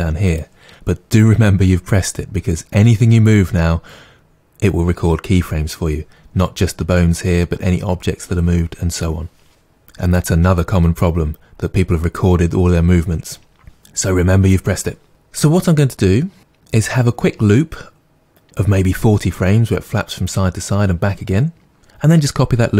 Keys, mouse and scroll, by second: 0.3 click, 15.1 click.